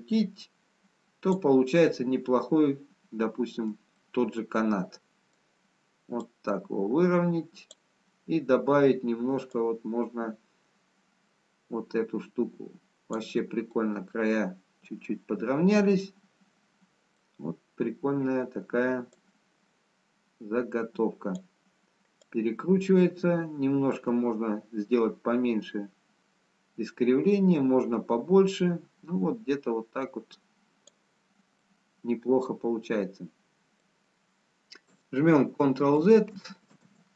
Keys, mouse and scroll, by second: 2.1 middle click, 5.1 middle click, 6.5 click, 10.0 click, 14.1 middle click, 19.3 click, 22.7 click, 32.0 middle click, 35.9 ctrl+z, 36.5 ctrl+z.